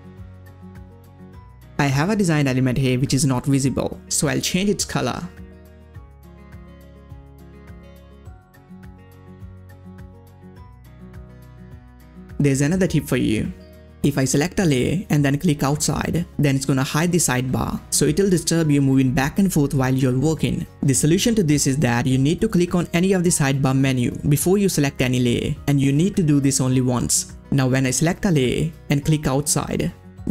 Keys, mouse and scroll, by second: 1.4 click, 4.3 click, 4.4 scroll down 1, 5.4 click, 7.3 click, 8.3 click, 14.5 click, 23.4 click, 23.4 click, 28.1 click.